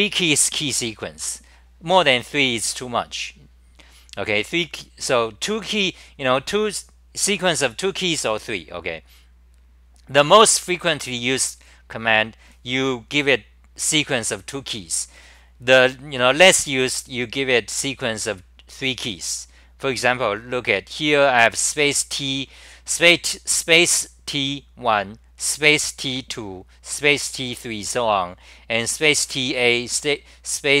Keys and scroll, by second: 9.1-9.9 scroll down 4, 9.9-14.5 scroll down 10, 17.7-18.3 scroll down 15, 18.7-19.5 scroll down 1.